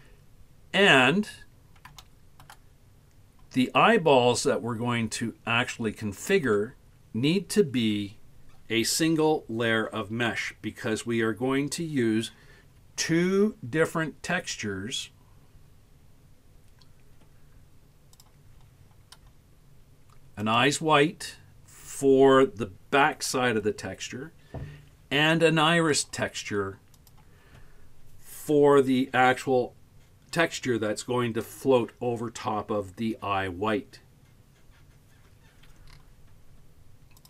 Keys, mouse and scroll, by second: 1.6 scroll up 1, 2.1-2.5 shift+middle drag, 2.9 scroll up 2, 5.7 middle click, 6.6 scroll down 1, 7.4-9.9 scroll down 1.